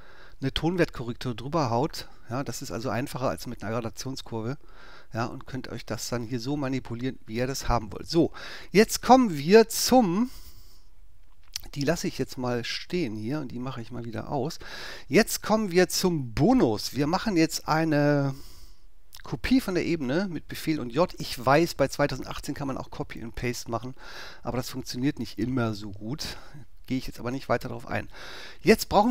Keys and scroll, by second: 19.5 super+j.